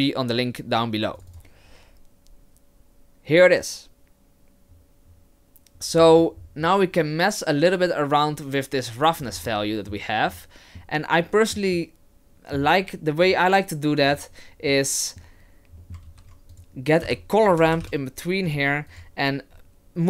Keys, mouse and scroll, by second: 6.0-6.5 scroll up 6, 9.3 scroll down 3, 9.5 middle click, 10.4 middle click, 11.3-11.8 scroll down 1, 11.8 middle click, 13.3 click, 14.7 middle click, 15.8 middle click, 16.1 shift+a.